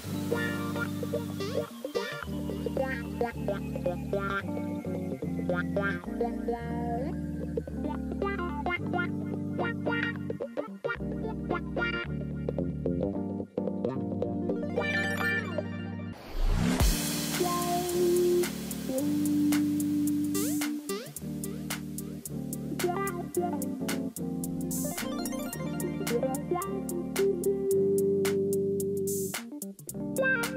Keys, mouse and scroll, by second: 0.9-5.0 typing, 10.8 click, 12.1 ctrl+t.